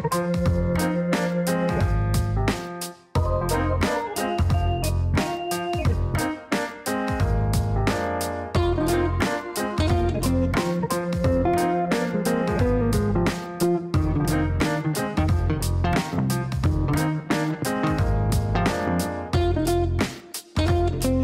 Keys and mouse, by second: 0.6 click, 1.8 click, 6.9-7.8 typing, 8.0 Down, 9.0-9.8 typing, 9.8 Down, 10.0 Down, 10.2 Down, 10.3 Down, 10.6 Down, 10.8 Down, 11.1 Down, 11.5 Return, 13.1 click, 15.0 click, 16.2 click, 18.3 click, 20.7 click.